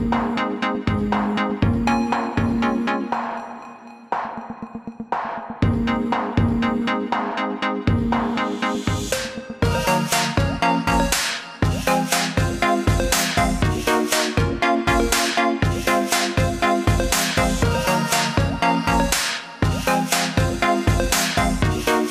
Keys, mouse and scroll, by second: 10.0 click, 22.0 click.